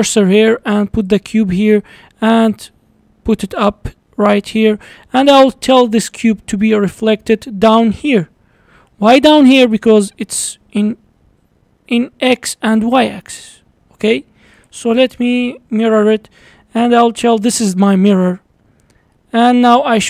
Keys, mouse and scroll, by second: 1.6 middle click, 2.2 g, 3.7-6.7 middle drag, 6.8-7.5 middle drag, 7.5-7.8 scroll down 5, 7.8 middle click, 8.3-10.1 scroll up 11, 10.1-13.1 middle drag, 16.0-17.4 drag, 19.1-20.0 middle drag.